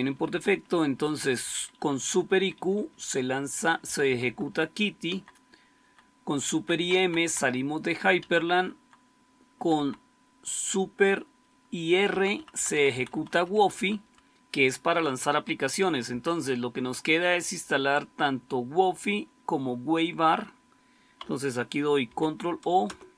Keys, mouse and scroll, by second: 0.0 Up, 0.2 Up, 0.4 Up, 0.6 Up, 0.8 Up, 1.0 Up, 1.2 Up, 1.4 Up, 1.6 Up, 1.8 Up, 2.0 Up, 2.2 Up, 2.5 Up, 2.7 Up, 2.9 Up, 3.8 Right, 4.0 Right, 4.1 Right, 4.4 Right, 5.0 Down, 5.7 Down, 6.4 Left, 6.7 Left, 6.9 Left, 7.1 Left, 8.1 Down, 8.4 Down, 8.7 Down, 9.7 Left, 12.0 Right, 12.3 Right, 12.4 Right, 12.6 Right, 12.9 Right, 13.0 Right, 13.2 Right, 13.4 Right, 13.6 Right, 13.9 Right, 16.0 Left, 21.9 ctrl+o, 22.7 Return.